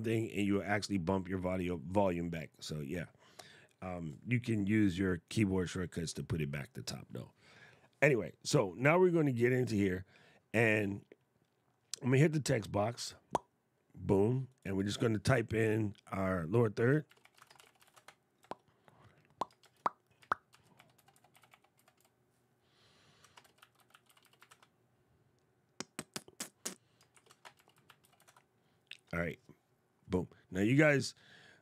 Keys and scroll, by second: 16.8 shift+d, 17.3 shift+r, 19.3 shift+Return, 20.2 shift+c, 23.2 shift+m, 26.8 shift+\, 27.3 shift+e.